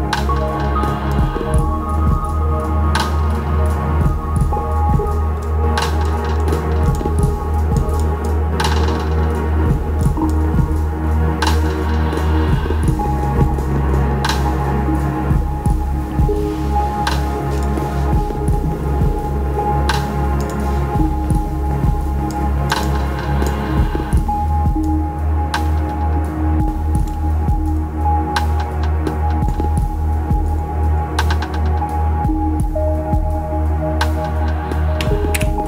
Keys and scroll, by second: 35.3 super+z.